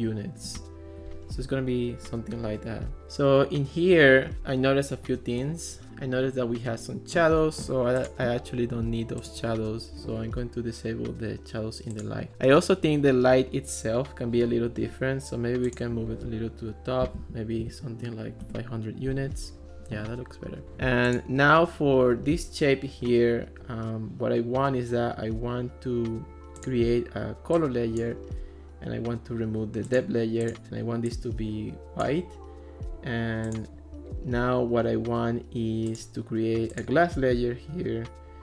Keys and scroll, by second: 0.0 0, 0.5 Return, 16.8-17.7 typing, 18.5 Return.